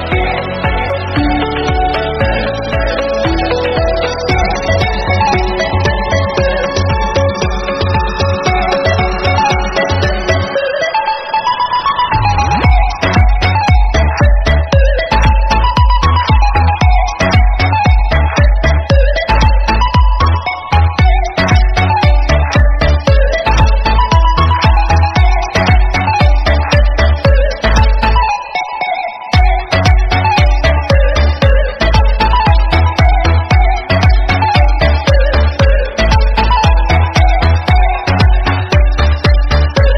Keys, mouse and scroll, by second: 0.4 click, 3.6-4.2 scroll down 2, 4.2 click, 4.8 scroll up 3, 5.5 drag, 8.9-10.3 scroll down 4, 10.3 click, 10.5-11.2 scroll up 3, 11.2 click, 11.5-14.1 typing, 12.0 shift+middle click, 14.7 scroll down 2, 14.8 shift+middle click, 15.3 shift+d, 15.9 KP_0, 17.2 g, 18.9 shift+d, 23.3 click, 24.4 click, 26.2-26.7 scroll down 2, 26.7 middle click, 27.0-27.5 scroll down 3, 27.5 drag, 27.9 KP_3, 28.3-28.7 scroll up 2, 28.7 g, 29.2 KP_0, 29.7-30.1 scroll up 1, 30.1 g, 33.0-33.5 scroll up 2, 33.6 drag, 34.0 click, 34.2 scroll down 6, 35.0 scroll down 2, 35.1 click, 36.3 click, 36.6-37.2 scroll down 12, 37.2 click, 37.4-38.0 scroll up 10, 38.0-38.6 scroll up 5, 38.6 scroll up 2.